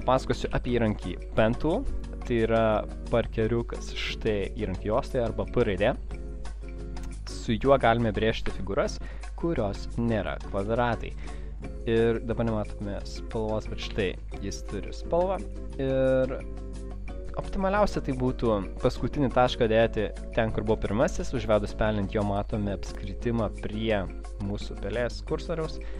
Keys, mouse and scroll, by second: 0.2 click, 0.6 p, 7.7 click, 9.3 double click, 9.7 click, 13.5 click, 24.9 click.